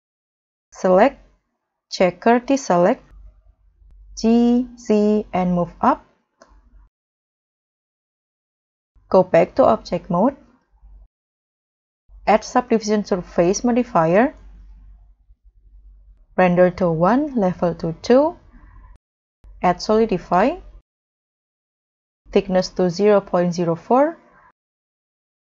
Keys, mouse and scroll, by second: 0.7 double click, 3.1 middle click, 4.2 m, 4.3 g, 15.2 middle click, 23.7 double click, 24.9 double click, 25.0 middle click.